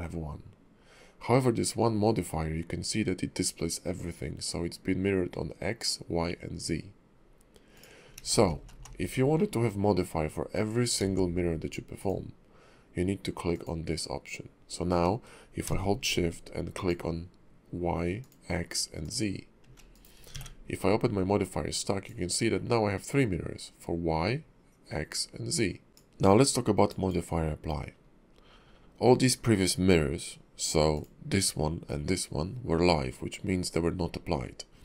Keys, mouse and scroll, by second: 8.2 ctrl+z, 8.4 ctrl+z, 8.6 ctrl+z, 9.1 ctrl+z, 9.3 middle click, 11.0 alt+x, 12.0 click, 16.7 shift+click, 18.2 shift+click, 19.0 shift+click, 20.3 ctrl+`, 25.9 click, 30.9 click.